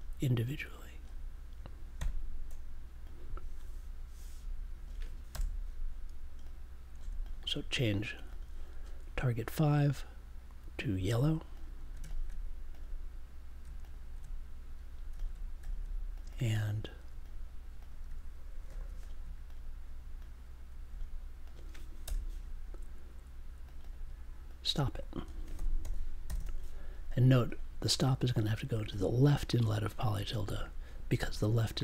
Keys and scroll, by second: 1.9 5, 5.3 BackSpace, 6.9 1, 18.6 super+j, 22.0 BackSpace, 25.5 s.